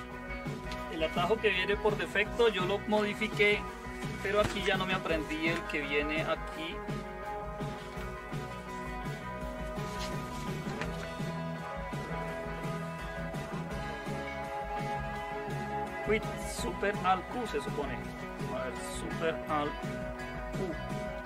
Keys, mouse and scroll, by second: 21.0 alt+super+q.